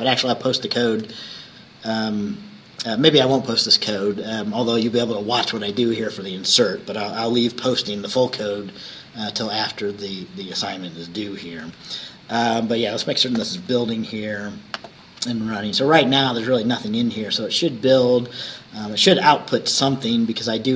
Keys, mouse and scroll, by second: 0.6 click, 1.1 ctrl+s, 11.7 ctrl+s, 13.4 ctrl+shift+b.